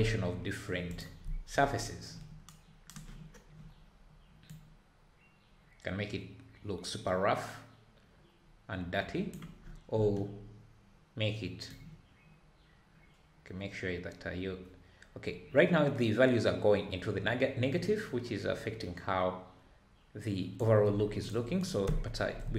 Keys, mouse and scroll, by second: 1.0 click, 1.8-3.3 scroll up 1, 3.3-4.3 scroll down 1, 4.5-8.0 drag, 11.7-14.7 drag.